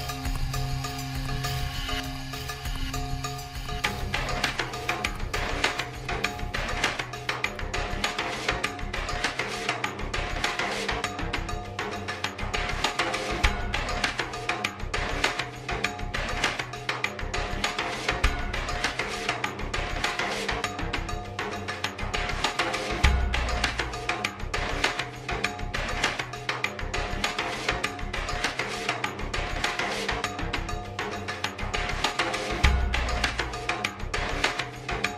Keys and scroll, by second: 4.3 ctrl+z, 4.7 ctrl+z, 12.4 typing, 15.2 typing, 15.5 ctrl+z, 29.8 typing, 31.9 typing, 34.6 ctrl+z.